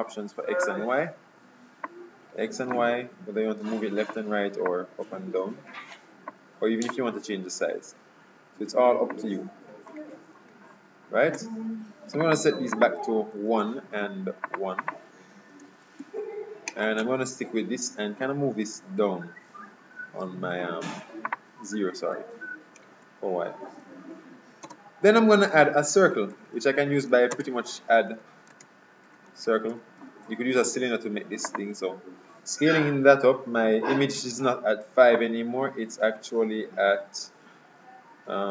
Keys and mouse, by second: 0.8-2.6 drag, 2.9-4.6 drag, 4.8-6.5 drag, 7.0-8.7 drag, 10.6 ctrl+z, 12.3-14.6 drag, 14.9-16.7 drag, 21.4-23.2 drag, 24.7 space, 27.4 space, 30.6 d, 35.3-37.1 drag.